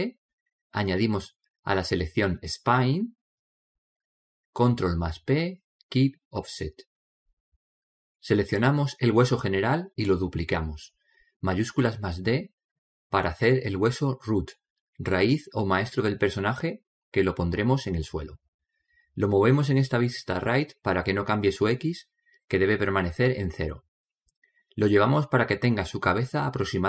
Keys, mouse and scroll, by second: 2.8 right click, 5.1 ctrl+p, 8.5-9.7 middle drag, 9.7 right click, 11.5 shift+d, 14.3-16.0 middle drag, 15.8 click, 17.2-18.8 middle drag, 18.8 click, 21.5 click, 23.5-26.8 drag.